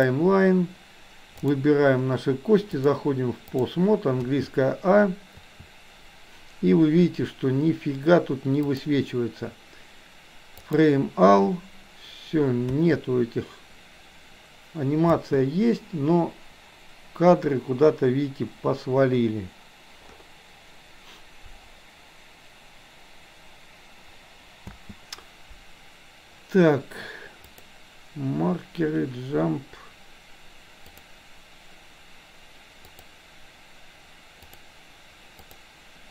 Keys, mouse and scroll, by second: 0.0 click, 2.6-3.7 drag, 4.2 a, 5.5 a, 8.7-10.7 drag, 12.7 a, 15.2 space, 24.7 space, 27.5-30.5 drag, 31.0-33.1 drag, 34.4-35.5 drag.